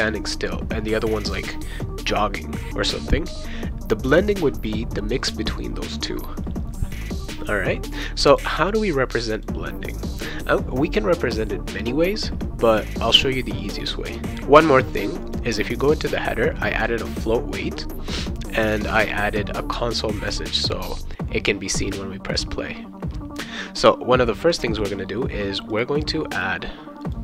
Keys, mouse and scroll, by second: 8.3 click, 9.3 click, 9.8 click, 15.2 click, 16.7 click, 18.0 click, 18.7 click, 20.0 click, 20.6 click, 25.7 click, 26.3 click, 27.0 click.